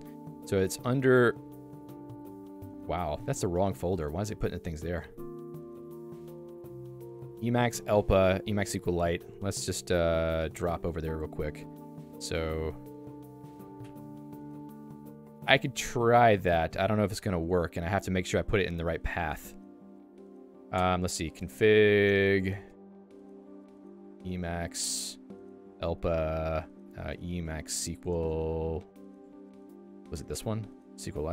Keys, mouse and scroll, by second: 9.9 super+e, 13.5 h, 13.6 h, 18.1 k, 18.3 k, 20.8-22.7 typing, 24.2 m, 24.6 Return, 24.9 l, 25.7 j, 27.1 e, 27.5 s, 28.1 Return, 30.0 l, 30.8 l.